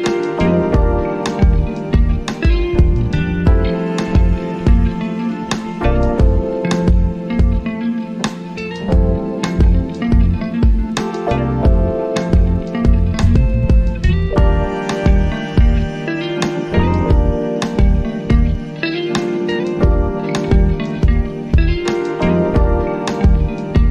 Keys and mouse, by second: 1.2-9.5 drag, 9.6 click, 13.9-23.9 drag.